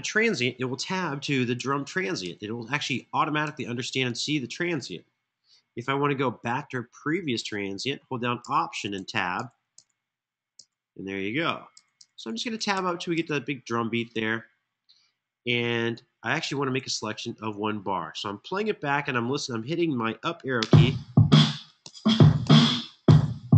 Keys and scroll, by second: 1.2 Tab, 1.9 Tab, 2.5 Tab, 3.1 Tab, 8.2 alt+Tab, 8.7 alt+Tab, 9.1 alt+Tab, 9.5 alt+Tab, 11.5 Tab, 11.7 Tab, 11.9 Tab, 12.1 Tab, 12.5 Tab, 12.8 Tab, 16.1 super+[, 16.5 super+[, 20.3 space, 21.1 Page_Up, 21.6 Page_Up, 22.2 Page_Up, 22.8 Page_Up.